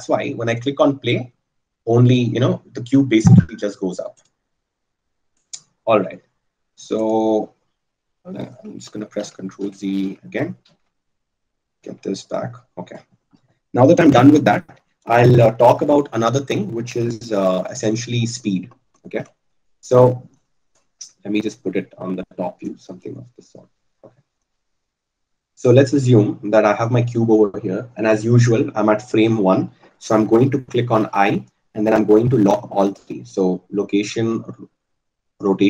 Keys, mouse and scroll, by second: 10.1-12.7 ctrl+z, 18.2 ctrl+z, 31.7 i, 34.1 click.